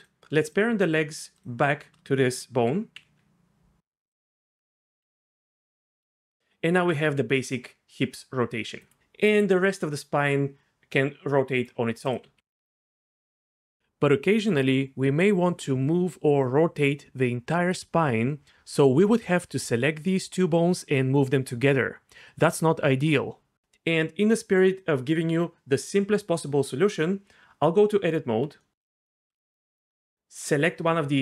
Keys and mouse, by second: 1.4 shift+click, 2.9 ctrl+p, 3.8 ctrl+z, 4.4 Tab, 4.9 r, 6.1 shift+middle click, 7.0 r, 9.2 r, 12.3 r, 18.7 click, 20.0 r, 22.3 right click, 27.8 Tab, 28.6 middle click.